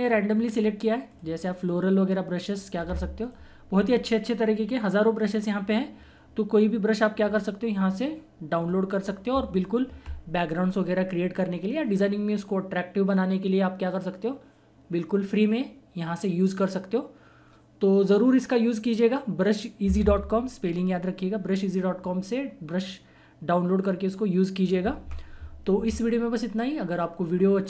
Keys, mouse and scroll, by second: 4.9 typing, 5.2 click.